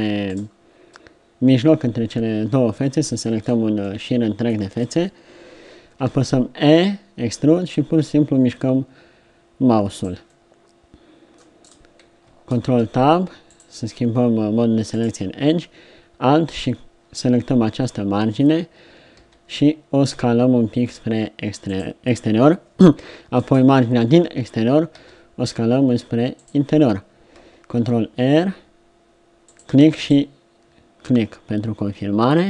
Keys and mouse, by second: 0.3-2.3 middle drag, 4.7-6.1 middle drag, 6.1 e, 10.3 middle click, 11.1 middle click, 12.6 ctrl+Tab, 19.2 s, 23.4-25.0 drag, 25.0 s, 27.8 ctrl+r.